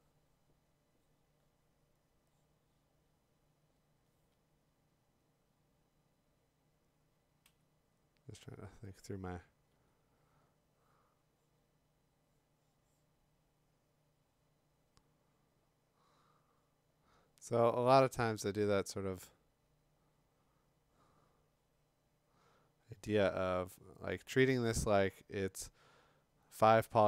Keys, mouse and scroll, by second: 7.4 x, 9.7 x.